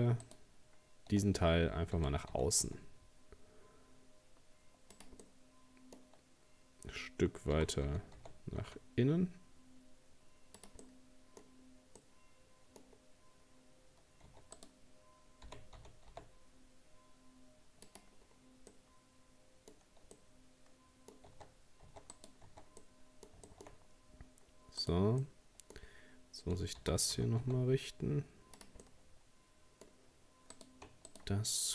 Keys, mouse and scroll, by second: 0.2 shift+right click, 2.0 g, 5.2-7.5 middle drag, 7.5 g, 10.8 middle click, 11.4-11.7 scroll up 3, 12.0 middle click, 12.9 scroll down 2, 14.3 scroll down 1, 14.3 Tab, 14.6 right click, 15.5 g, 18.2-18.7 scroll down 1, 18.7-19.8 middle drag, 19.8-20.2 scroll up 1, 20.2-21.3 middle drag, 21.3 Tab, 21.9 Tab, 22.1 right click, 22.5 Tab, 22.8 middle click, 23.8 scroll up 1, 24.8 right click, 25.2-26.8 middle drag, 26.8 g, 28.8-30.5 middle drag, 30.5 right click, 31.1 shift+right click.